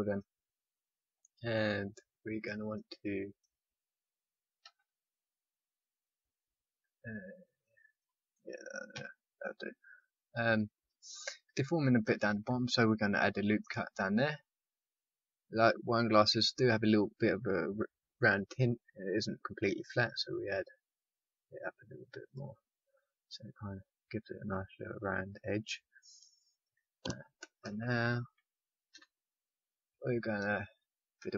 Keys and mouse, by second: 4.6 click, 4.6 z, 6.6 z, 8.9 a, 13.1 ctrl+r, 22.6-25.6 middle drag, 27.6 KP_1, 28.0 KP_5, 28.9 KP_3.